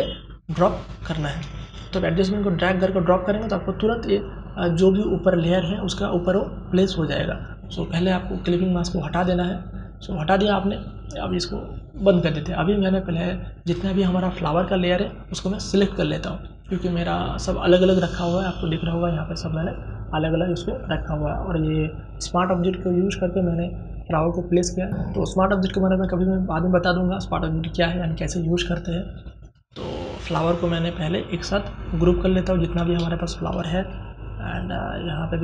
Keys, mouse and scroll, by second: 15.5-16.9 scroll down 1, 16.9 click, 17.5 ctrl+z, 18.0 click, 18.5 ctrl+z, 19.2 click, 19.5 ctrl+z, 20.5-21.9 scroll up 1, 24.8-26.0 scroll up 1, 27.9-29.0 scroll up 1, 29.1 click, 29.5-30.9 scroll down 1, 31.5 shift+click, 32.4 ctrl+g, 33.4-35.4 drag.